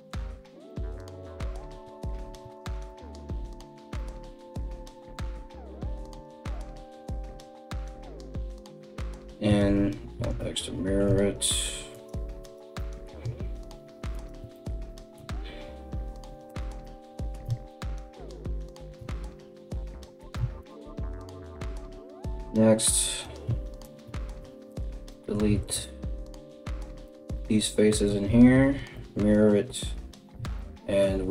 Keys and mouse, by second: 1.8 ctrl+r, 3.0 Tab, 3.7 Tab, 4.7 right click, 5.7 ctrl+right click, 6.6 alt+s, 8.0 alt+s, 9.3 alt+x, 9.8 Tab, 10.7 Tab, 11.5 right click, 12.0 right click, 13.7 ctrl+right click, 14.5-21.0 middle drag, 14.5 g, 16.2 Tab, 17.1 Tab, 18.3 g, 19.9 Tab, 20.6 KP_1, 21.0 right click, 21.2-22.8 middle drag, 21.3 Tab, 22.5 3, 22.8 right click, 23.0 ctrl+middle click, 23.4 ctrl+right click, 23.6-31.3 ctrl+middle drag, 24.0 x, 25.1 ctrl+z, 25.7 x, 27.9 alt+x, 30.0 Tab.